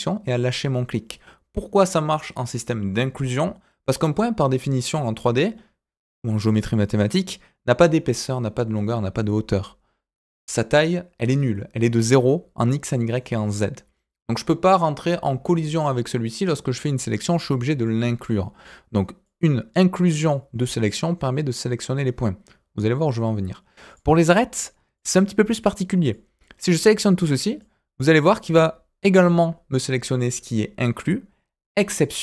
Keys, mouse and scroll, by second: 17.7 click, 18.2 click, 19.2-20.3 drag, 23.9 click, 24.9 click, 26.1-27.6 drag.